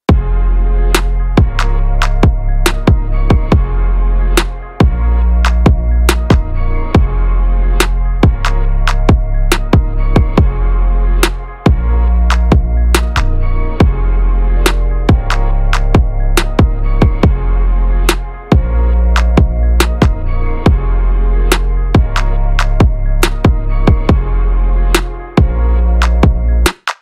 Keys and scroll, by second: 14.1 ctrl+=, 20.0 ctrl+=, 21.0 space, 24.1 ctrl+=.